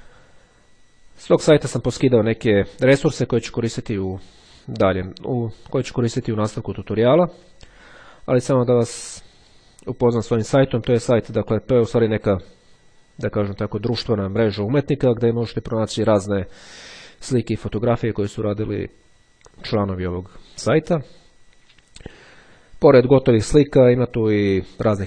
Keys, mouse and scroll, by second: 9.1-10.1 drag, 10.5 click, 15.9-16.5 scroll down 2, 16.6-17.1 scroll down 2, 17.4-17.9 scroll down 2, 18.1-18.6 scroll down 2, 18.9-19.4 scroll down 2, 19.8-21.8 scroll up 2.